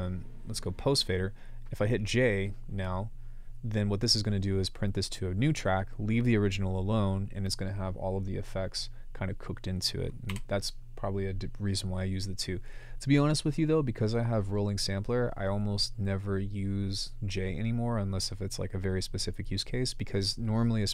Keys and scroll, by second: 10.3 BackSpace.